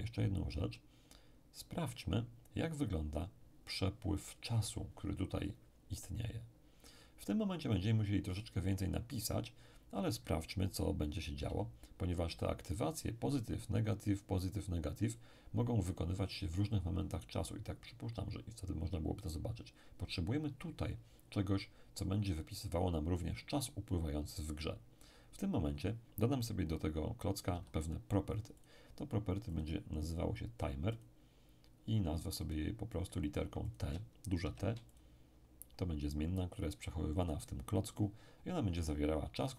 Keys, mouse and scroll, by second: 11.4 n, 12.2 n, 27.5 n, 28.6-30.5 drag, 30.9 click, 32.4-34.7 drag, 34.4 shift+t, 34.9 shift+click.